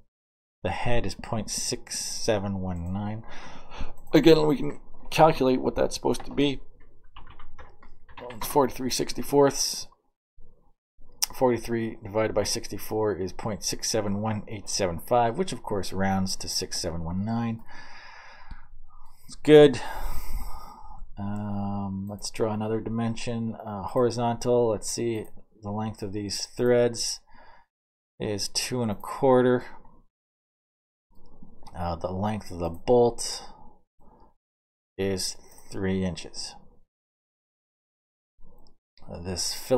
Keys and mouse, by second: 1.2-3.3 drag, 3.9 right click, 4.9-9.6 typing, 17.5 middle click, 18.0 middle click, 24.6 click, 27.0 click, 30.7 middle click, 34.6 click, 37.1 click, 37.8 middle click, 39.7 middle click.